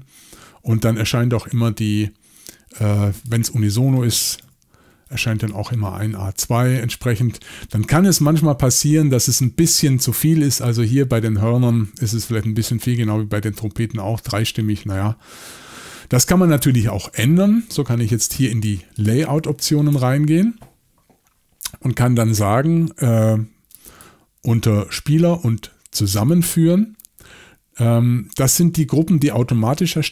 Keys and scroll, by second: 4.3 typing, 6.0 typing, 8.6 y, 16.3-17.6 typing, 19.9 shift+super+l.